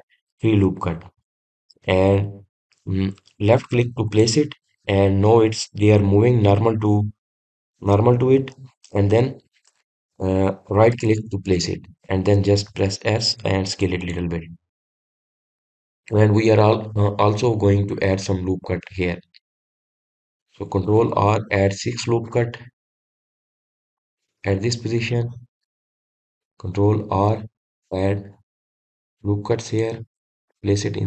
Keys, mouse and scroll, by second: 15.4 click, 18.6-18.9 scroll down 2, 19.5 scroll up 2, 20.2-20.5 scroll down 1, 21.1-22.1 scroll up 1, 22.3 ctrl+r, 28.2 ctrl+r.